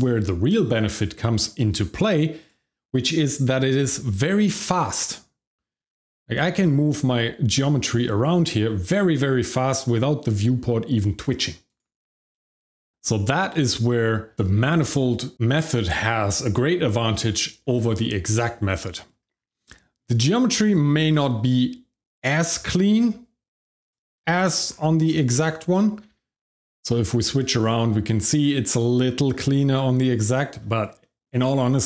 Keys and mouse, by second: 1.4 shift+middle drag, 2.4 click, 3.8 g, 11.7 right click, 12.3-12.9 shift+middle drag, 13.0 middle drag, 13.5-13.8 shift+middle drag, 18.8 middle drag, 19.6-20.0 shift+middle drag, 20.8 shift+middle click, 21.2 middle drag, 22.5 g, 22.9 x, 23.8 click, 24.2 shift+middle drag, 25.1 click, 25.6 middle click, 30.0 click, 31.0 shift+middle click.